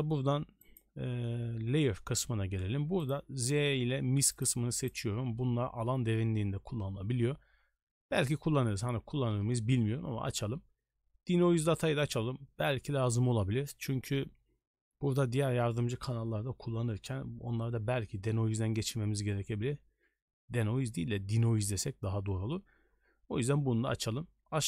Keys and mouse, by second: 3.0 click, 4.7 click, 12.0 click.